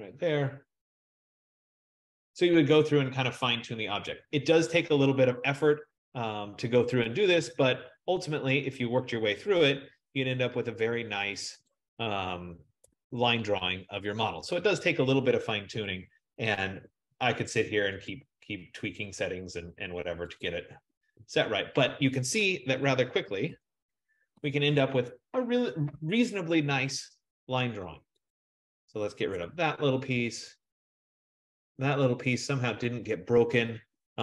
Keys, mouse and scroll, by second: 1.9 click, 2.3 click, 7.2 click, 8.3 F15, 11.8 click, 16.0 click, 17.0 BackSpace, 18.1 click, 19.1 BackSpace, 20.5 click, 20.8 BackSpace, 23.5 ctrl+0, 28.4 click, 29.5 BackSpace, 30.7 click.